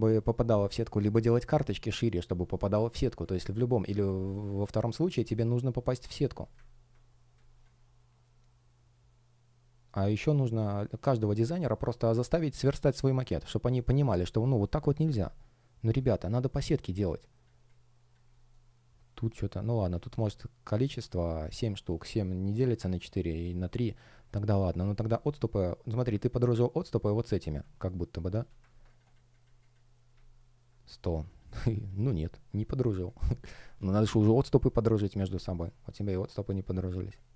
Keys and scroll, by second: 4.0 space, 5.2 shift+o, 7.2 space, 14.4 shift+o, 16.6 space, 25.1 shift+p, 33.1 space.